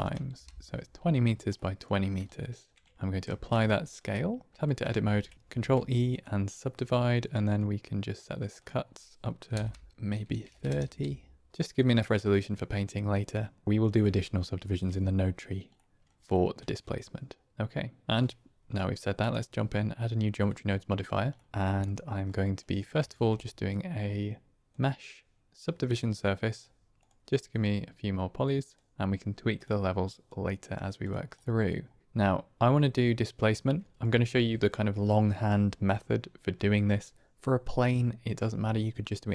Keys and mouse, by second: 1.5 middle drag, 2.2 shift+middle click, 2.8 middle drag, 3.2 ctrl+a, 4.5 Tab, 5.0 ctrl+r, 5.3 ctrl+z, 5.4 ctrl+e, 8.5-9.9 drag, 13.6 Tab, 15.7-16.5 middle drag, 19.1 click, 20.5-21.3 drag, 21.3 middle click, 21.6 middle click, 22.5 click, 23.0 shift+a, 27.5-31.0 drag, 31.3 middle click.